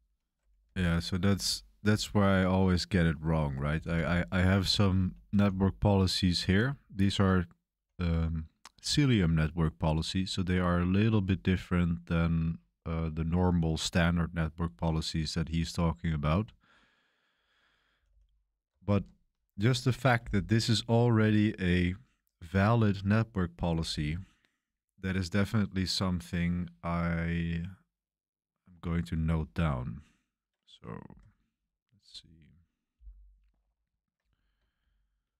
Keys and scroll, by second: 0.6 BackSpace, 3.7 super+3, 4.6-7.8 typing, 9.0-12.2 typing, 15.9-19.6 typing, 31.2 super+7.